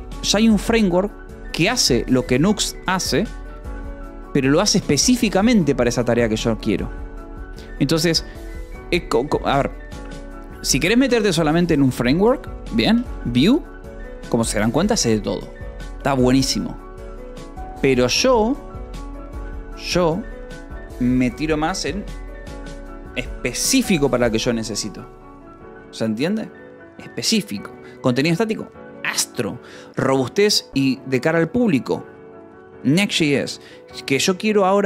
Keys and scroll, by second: 8.5 Escape, 9.6 k, 10.8 j, 11.3 k, 13.0 j, 14.4 Escape.